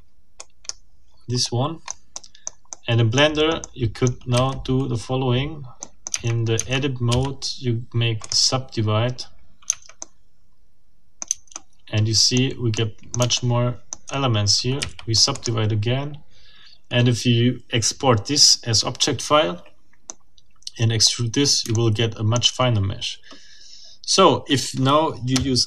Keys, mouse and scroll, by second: 0.4 click, 1.4 middle click, 1.8-2.3 scroll up 2, 2.3 middle click, 2.8 middle click, 3.7 middle click, 4.4 a, 5.8 middle click, 6.1 Tab, 7.1 w, 8.2 middle click, 9.1-9.5 scroll up 2, 9.7 Tab, 10.0-11.4 middle drag, 11.3 Tab, 11.5 middle click, 12.3 middle click, 12.7 middle click, 13.5 shift+middle click, 14.8 shift+w, 15.3 shift+middle click, 20.1-21.2 middle drag, 21.7 shift+middle click.